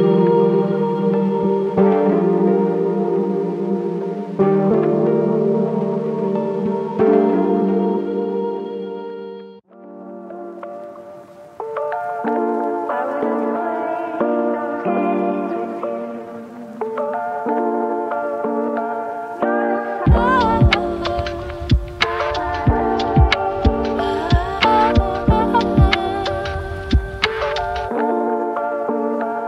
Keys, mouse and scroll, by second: 3.2 click, 19.0 click, 20.0-20.4 scroll down 1, 21.1 scroll down 1, 22.5 click.